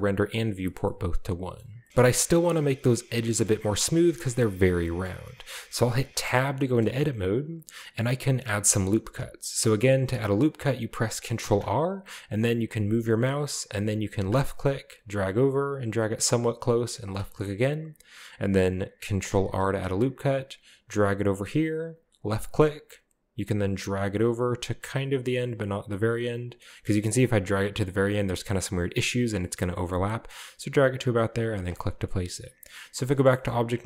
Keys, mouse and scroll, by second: 0.7-1.5 shift+middle drag, 1.6 middle drag, 1.7-3.1 scroll up 2, 1.9 ctrl+z, 2.3-3.1 shift+middle drag, 3.3-4.0 middle drag, 4.8 middle drag, 5.1-6.1 middle drag, 5.4-6.1 scroll down 3, 6.2 Tab, 6.8 middle click, 7.0-7.9 scroll up 1, 11.4 ctrl+r, 14.3 click, 17.1-17.4 drag, 17.4 middle drag, 17.6 click, 17.7 middle click, 18.0-19.0 middle drag, 19.6 ctrl+r, 22.2 click, 31.6 click, 31.9-32.8 scroll down 2, 32.1 middle click, 32.8 Tab, 33.3-33.8 shift+middle drag, 33.5-33.8 shift+scroll up 1.